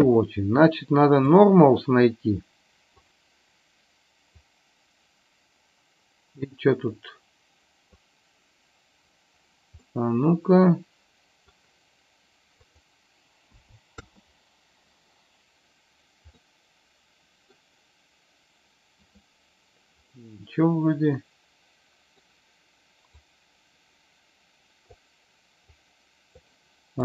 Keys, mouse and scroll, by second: 2.9 click, 4.2-7.9 drag, 9.7-11.4 middle drag, 12.6-14.2 drag, 16.4-17.4 middle drag, 20.1-22.2 middle drag, 23.3-24.9 drag, 25.7 click.